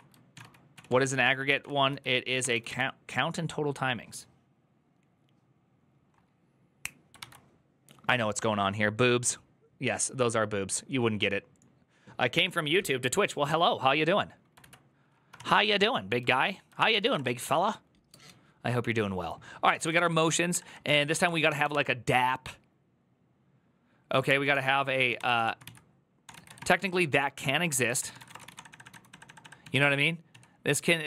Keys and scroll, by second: 0.0-2.8 typing, 0.1 ctrl+w, 0.2 ctrl+o, 7.1 alt++, 14.4 alt+[, 14.4 alt+{, 15.0-17.5 typing, 16.1 ctrl+o, 19.4-21.9 typing, 23.6-30.1 typing.